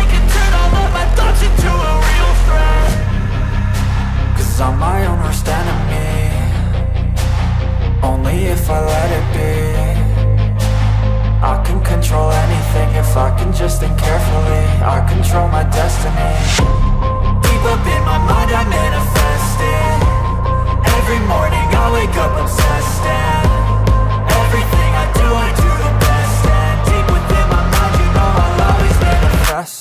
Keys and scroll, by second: 20.3 ctrl+z.